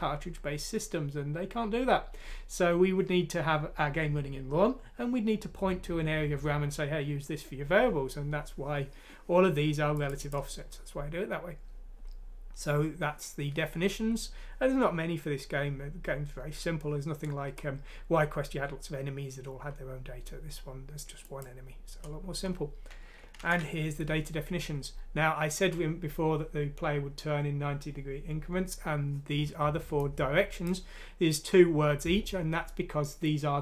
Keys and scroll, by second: 23.4 ctrl+Home.